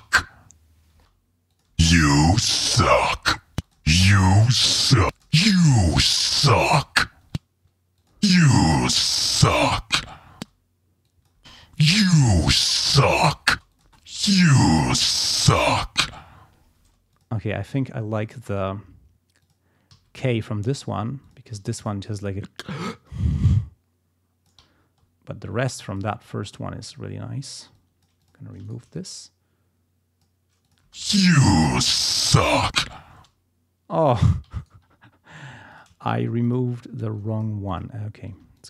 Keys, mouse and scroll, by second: 0.5 ctrl+scroll down 2, 0.9 ctrl+space, 1.5 ctrl+click, 1.7 space, 1.8 ctrl+scroll up 2, 2.5 ctrl+scroll down 2, 3.5 space, 3.6 ctrl+click, 3.9 ctrl+scroll up 2, 5.0 space, 5.1 click, 5.5 ctrl+scroll down 1, 7.3 space, 8.0 ctrl+click, 8.1 ctrl+space, 10.3 space, 11.0 click, 11.4 space, 11.7 ctrl+scroll up 2, 12.4 ctrl+scroll down 2, 13.0 ctrl+scroll up 2, 13.5 ctrl+space, 13.7 ctrl+click, 16.8 space, 17.1 click, 17.7 s, 18.2 click, 18.6 s, 19.4 click, 19.9 s, 20.2 click, 21.2 click, 21.6 s, 21.8 click, 23.1-24.7 drag, 24.7 ctrl+scroll up 2, 25.8 click, 26.4 ctrl+scroll down 2, 27.7 click, 28.6 shift+right click, 29.3-30.4 drag, 30.6 click, 30.8 space, 31.2 ctrl+scroll down 2, 31.6 ctrl+scroll up 2, 33.1 space, 34.6 ctrl+right click, 35.7 shift+click, 36.1 shift+right click, 36.4 shift+click, 37.0 shift+click, 37.7 click, 38.3 s, 38.6 click.